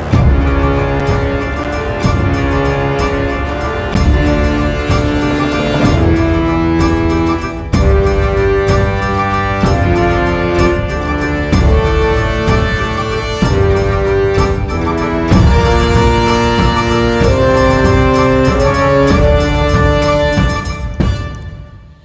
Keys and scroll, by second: 20.9 space.